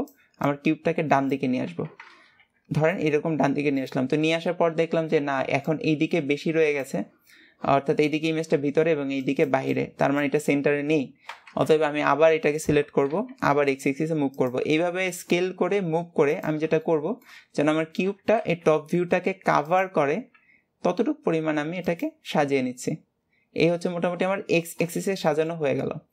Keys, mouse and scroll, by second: 15.0-15.8 scroll, 17.0 middle click, 17.7-18.3 scroll, 23.7-25.4 scroll down 7, 25.4 shift+middle click, 26.0 scroll up 1.